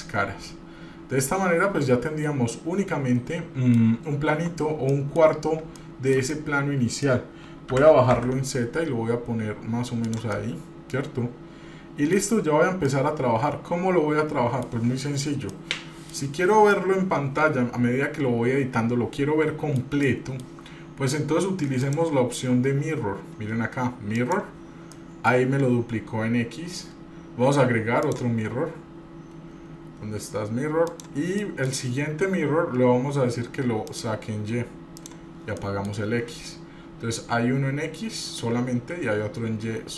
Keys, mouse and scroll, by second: 0.1-4.0 middle drag, 4.5 Tab, 5.1 middle click, 5.6 scroll up 1, 6.0 shift+middle click, 6.5 middle click, 6.5 scroll down 1, 7.9 g, 10.5-12.4 middle drag, 13.1-14.9 middle drag, 13.1 scroll up 1, 15.7-16.3 middle drag, 16.9-17.5 middle drag, 17.5-18.6 drag, 18.6-20.0 middle drag, 20.2-20.6 shift+middle drag, 22.0-24.6 drag, 25.1 middle drag, 28.2-31.2 drag, 31.6 middle click, 32.7-33.7 scroll down 2, 34.0 click, 35.1 click, 35.8 middle click, 36.1 scroll down 2, 36.8 scroll up 2, 38.0 scroll down 1, 39.7 scroll up 1.